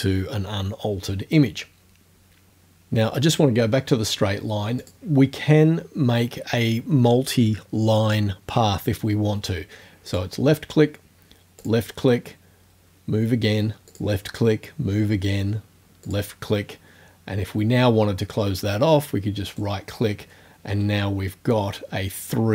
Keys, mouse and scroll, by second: 4.8 click, 10.1 click, 11.6 click, 13.9 click, 16.1 click, 19.5 right click.